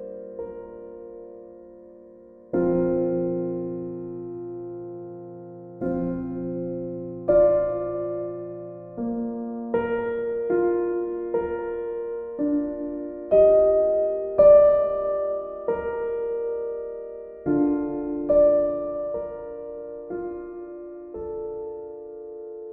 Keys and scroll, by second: 10.6 b.